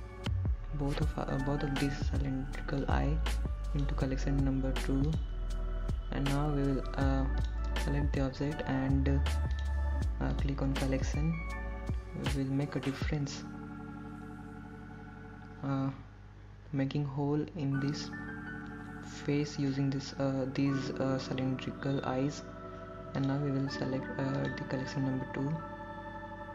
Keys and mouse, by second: 0.6 click, 2.6 shift+click, 6.0 click, 8.1 click, 12.6-20.1 drag, 26.3-26.5 drag.